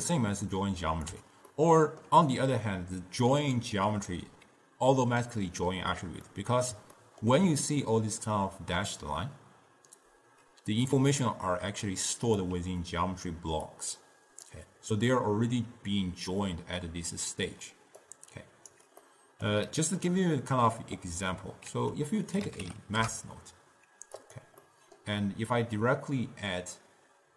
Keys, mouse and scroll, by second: 1.6-4.7 ctrl+middle drag, 6.4-10.1 middle drag, 11.0 d, 11.7 click, 12.5-15.3 typing, 13.8-14.6 drag, 18.1 right click, 18.9 d, 19.1-21.8 middle drag, 21.8 ctrl+a, 24.7-27.3 middle drag.